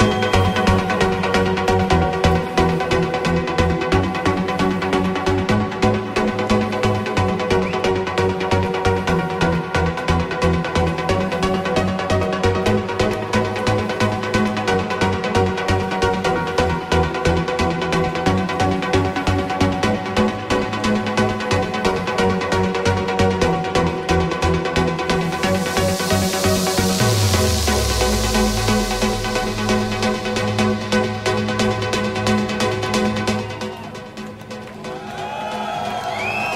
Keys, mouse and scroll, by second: 2.0 KP_3, 3.6 click, 15.7 alt+click, 16.9-36.5 drag.